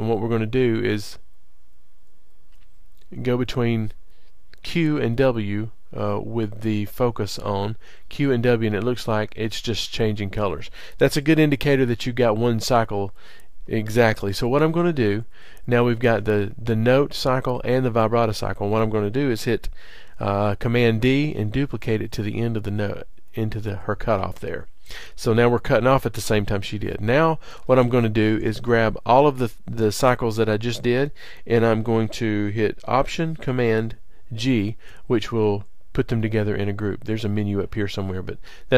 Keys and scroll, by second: 11.1 super+], 14.0 super+[, 18.1 super+[, 20.9 super+d, 34.2 alt+super+g.